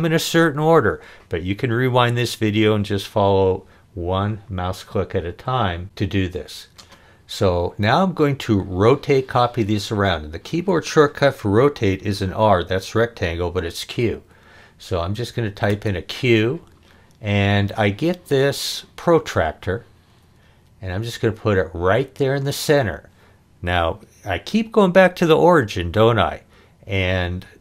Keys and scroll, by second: 15.7 q.